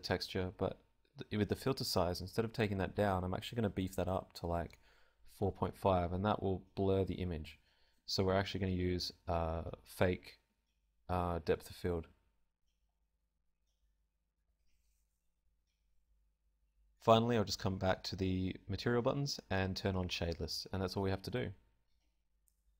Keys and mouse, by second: 12.0-13.1 middle drag, 13.1-22.5 drag.